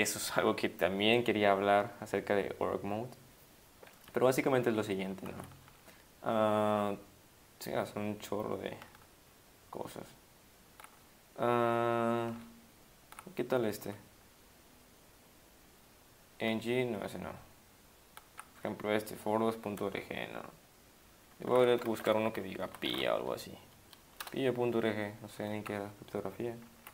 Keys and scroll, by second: 4.5 Down, 4.7 Down, 5.3 Up, 5.5 Down, 5.6 Down, 6.4-8.8 Down, 9.0 Up, 9.5-10.8 Up, 11.0 Down, 11.5 Down, 11.7 Down, 11.8 Down, 11.9 Down, 12.1 Down, 12.3 Down, 12.4 Up, 12.9 Up, 13.1 Up, 13.1 Up, 13.8 Down, 16.6 Up, 17.0 Up, 17.1-18.2 Up, 18.6 Down, 21.9 ctrl+s, 22.4-23.4 typing, 24.2 Return, 26.8 Right.